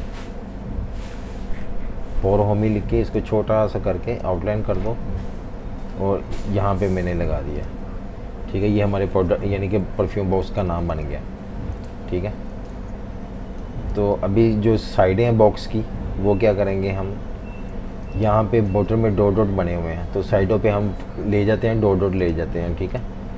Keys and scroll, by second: 9.6 super+-, 10.5 v, 10.6 space, 11.8-12.7 typing, 14.0 v, 16.5 m, 18.1-18.7 typing.